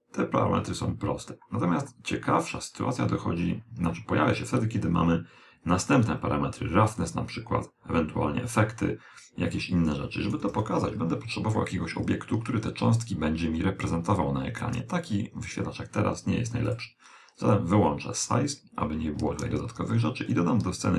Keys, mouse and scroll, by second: 10.5 KP_1, 11.4-16.6 middle drag, 16.6 click, 19.4 shift+a.